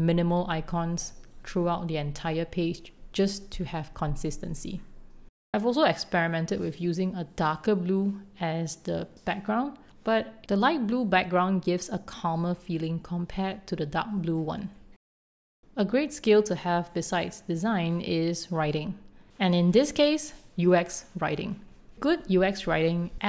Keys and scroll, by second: 0.5 2, 1.0 Return, 4.0 super+z, 14.1 super+z.